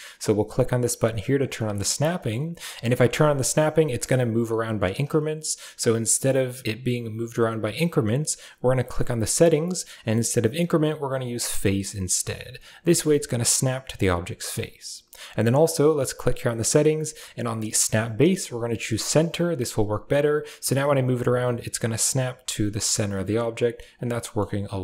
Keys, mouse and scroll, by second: 1.2 click, 1.5 shift+middle click, 2.1 middle drag, 6.0-11.9 drag, 16.0-19.8 drag, 24.1 middle drag.